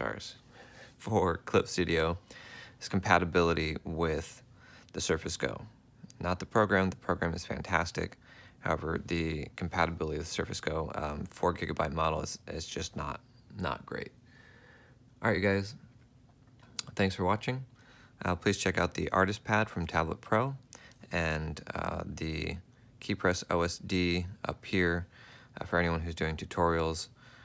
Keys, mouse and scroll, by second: 21.8 right click, 22.3 space, 23.4 ctrl+alt+click, 23.7 ctrl+F4, 24.2 F4.